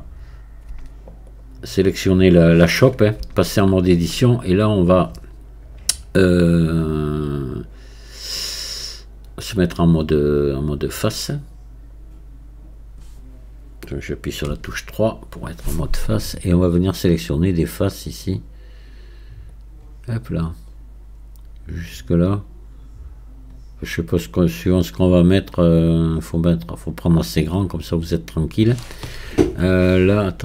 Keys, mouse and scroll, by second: 19.5-22.5 drag.